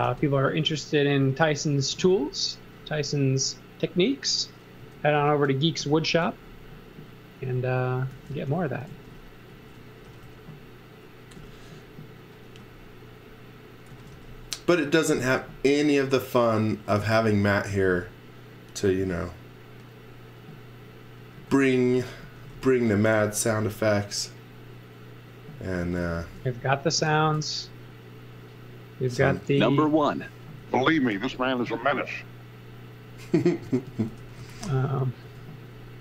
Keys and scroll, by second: 0.0 v, 0.6 space, 1.9 m, 4.8 space, 5.8 m, 6.8-10.0 typing, 11.3 m, 13.6-15.1 typing, 16.7 x, 17.0 v, 17.6 z, 19.0 m, 20.0 m, 21.1-23.5 typing, 25.5-26.5 typing, 29.6 z, 30.6 m, 33.6-34.8 typing, 35.2 Insert.